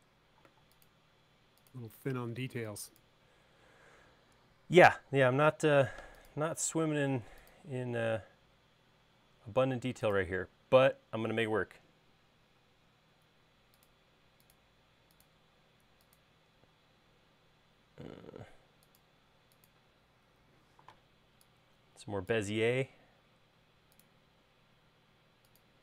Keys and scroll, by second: 0.3 c, 2.8 e, 6.0 a, 13.4 |.